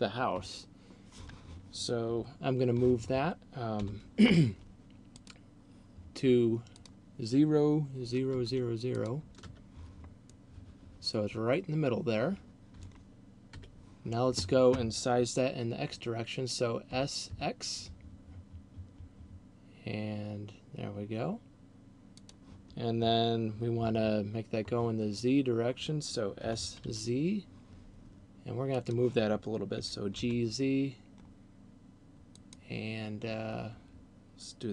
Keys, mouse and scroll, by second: 0.5 KP_1, 4.0 n, 5.3 click, 7.0 click, 9.0 click, 10.3 middle click, 13.5 KP_1, 16.8 s, 22.5 click, 26.5 s, 29.0 click, 29.8 g, 32.5 click.